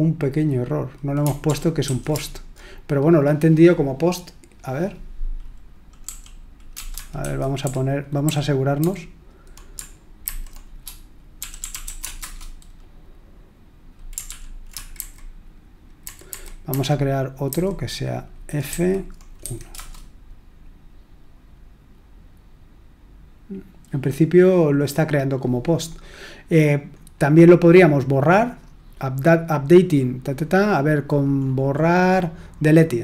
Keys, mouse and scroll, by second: 1.4 ctrl+p, 1.8 ctrl+a, 6.0 l, 7.2 alt+f, 7.6 alt+f, 8.2 alt+h, 8.7 alt+h, 10.2 alt+b, 11.1-12.3 typing, 14.2 ctrl+p, 14.9 alt+b, 16.0 alt+b, 16.3 alt+b, 16.6 alt+b, 17.4 alt+b, 18.7 alt+f, 19.4 1, 19.7 Return, 26.9-28.3 scroll down 2, 28.3-29.9 scroll down 1, 29.9-33.0 scroll down 2.